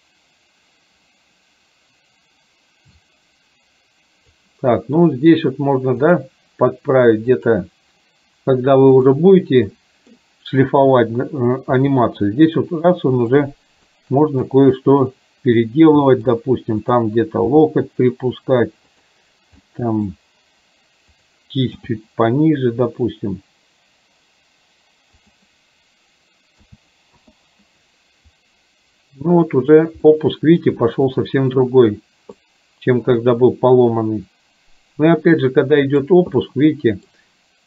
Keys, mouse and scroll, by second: 6.2 click, 7.4 click, 9.0 click, 9.8 middle click, 11.8 r, 14.0 middle click, 15.2-16.4 middle drag, 17.0 click, 19.8 middle click, 26.7 a, 28.4-29.8 drag, 30.0-30.7 middle drag, 32.4-36.0 drag, 36.5-37.2 middle drag.